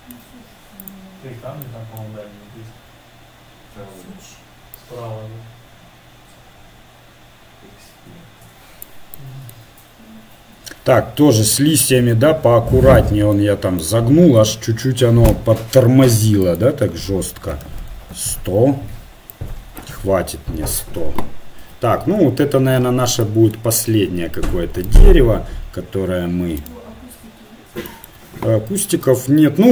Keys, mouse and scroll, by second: 1.2-5.4 middle drag, 12.1-13.3 middle drag, 18.9 KP_0, 24.0 KP_1, 27.1-28.9 right drag, 29.0 s.